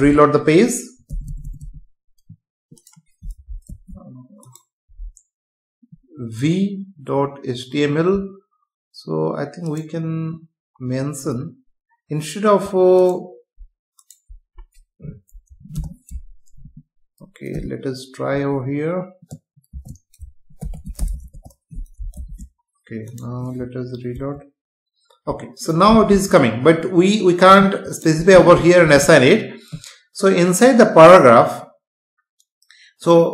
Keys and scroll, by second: 0.1 F5, 3.7 ctrl+s, 15.7 BackSpace, 16.7 Left, 22.2 ctrl+s, 24.2 F5.